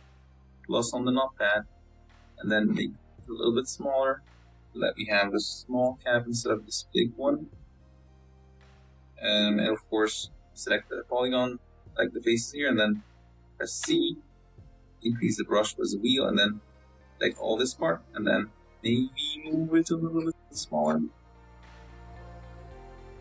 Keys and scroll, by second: 0.4 s, 1.6 Tab, 2.3 s, 5.3 z, 8.1 z, 12.6 Tab, 13.2 z, 14.7 a, 18.4 c, 20.6-23.0 typing.